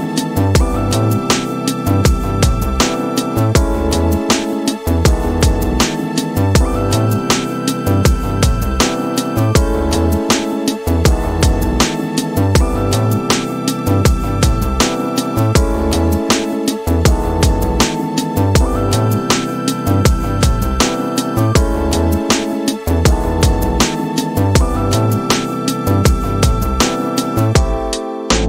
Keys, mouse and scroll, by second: 0.1-1.7 right drag, 2.9 click, 3.8-6.4 drag, 7.7 click, 9.3 scroll down 1, 10.8 space, 20.7-21.1 scroll up 1, 21.1-21.7 scroll down 1, 21.9 space, 22.5 scroll down 1, 22.6-25.1 middle drag, 25.4 scroll down 3, 25.8 middle click.